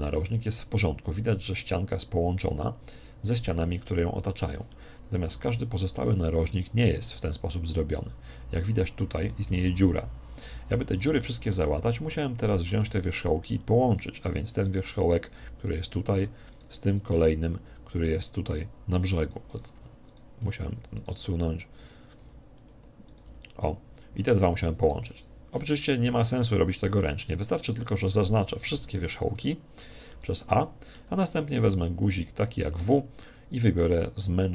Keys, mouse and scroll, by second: 3.8-7.1 middle drag, 6.8 right click, 7.2 g, 12.0-14.1 middle drag, 12.8 ctrl+Tab, 14.1 right click, 14.6 g, 16.0-18.7 right drag, 17.6 g, 19.3-22.8 right drag, 22.6 click, 23.0 right click, 23.2 g, 24.9 ctrl+z, 25.1 ctrl+z, 26.0 a, 26.5-31.9 middle drag, 28.7 a, 31.7 w.